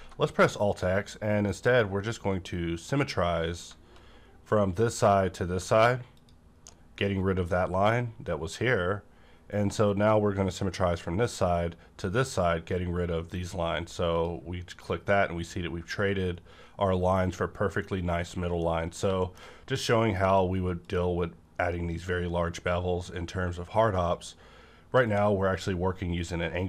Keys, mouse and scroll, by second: 3.6 alt+x, 3.6-6.1 middle drag, 6.1 shift+click, 18.5 shift+click, 18.9 middle click, 19.1 scroll up 1, 19.3 scroll down 1, 19.8 middle click, 20.2 q, 20.7 click, 20.8 click.